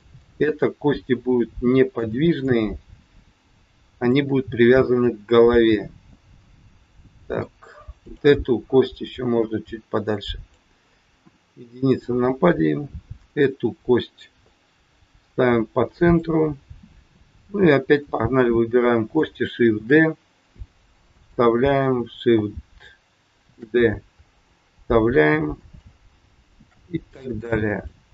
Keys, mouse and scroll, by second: 0.2 middle click, 2.3 click, 5.0 middle click, 8.0 click, 8.9 click, 11.3 KP_1, 13.3 click, 14.5 click, 17.2 click, 17.8 click, 19.7 shift+d, 22.2 shift+d, 26.6 shift+d.